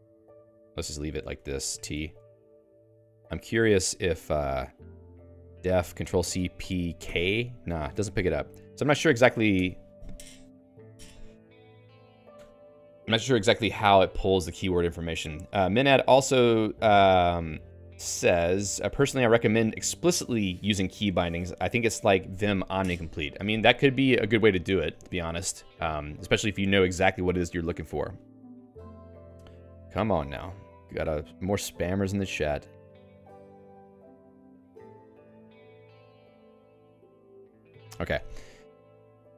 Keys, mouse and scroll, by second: 0.0-1.7 typing, 1.9 Escape, 2.3 ctrl+s, 2.8 j, 4.5-5.8 typing, 7.9 Escape, 8.1-9.4 typing, 9.5 Escape, 13.8 Escape, 13.9 k, 14.8 j.